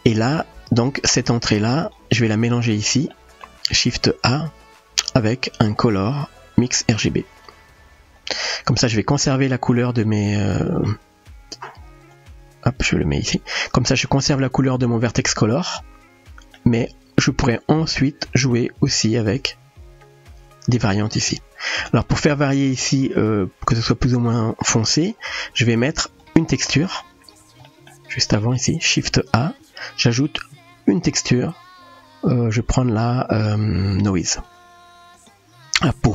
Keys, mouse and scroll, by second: 0.4 click, 1.7 click, 3.3 middle click, 8.2 click, 10.1-10.9 middle drag, 12.1-13.4 drag, 15.6-16.6 middle drag, 17.5-20.8 drag, 22.0 middle click, 23.2-24.3 drag, 24.7 middle click, 25.9 click, 26.5 click, 27.7 middle click, 29.7 shift+a.